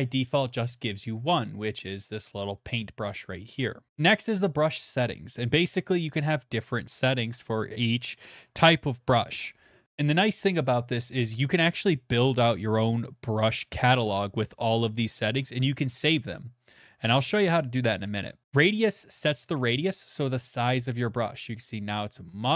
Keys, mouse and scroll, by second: 1.7 click, 2.4 click, 2.7 click, 3.0 click, 3.9 scroll, 5.3 middle click, 5.5 right click, 19.7 click, 20.4 click, 22.1 click, 22.4 click.